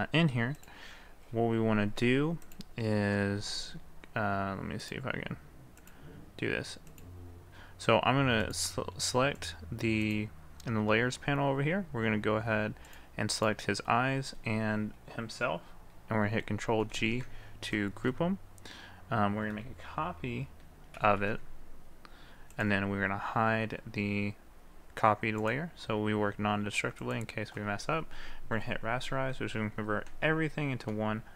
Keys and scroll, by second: 16.9 ctrl+g, 21.0 ctrl+c, 21.3 ctrl+v.